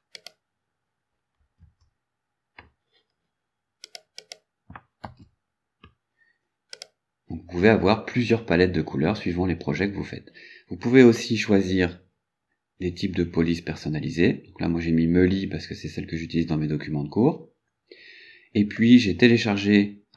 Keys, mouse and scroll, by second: 0.2 click, 1.7 Tab, 3.9 click, 5.1 ctrl+v, 6.8 click, 8.8-9.2 scroll down 2, 9.8-10.2 scroll up 2, 11.1 scroll up 2, 19.2 scroll down 2.